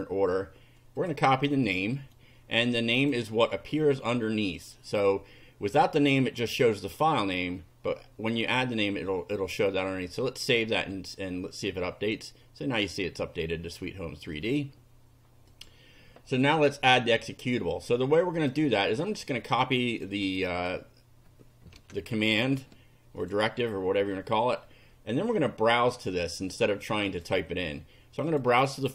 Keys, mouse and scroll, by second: 1.0 click, 1.7 click, 2.0 right click, 3.0 click, 10.3 click, 14.3 click, 15.5 click, 17.7 click, 18.9 right click, 20.0 click, 20.5 click, 21.8 Return, 22.1 right click, 23.2 click, 24.2 click, 26.6 click, 28.2 click.